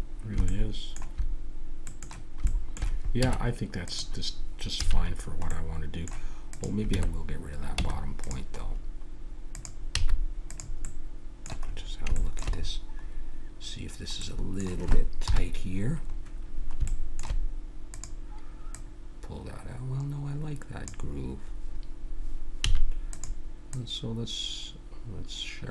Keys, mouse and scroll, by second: 0.0 middle click, 3.2 Tab, 4.8 a, 5.1 middle click, 5.8 middle click, 6.5-8.3 drag, 6.9 Tab, 7.8 Tab, 8.6 middle click, 9.5-11.0 drag, 10.0 x, 14.1-15.2 middle drag, 15.2 KP_1, 15.9 middle click, 17.9-20.5 drag, 22.6 a, 23.1-25.6 drag.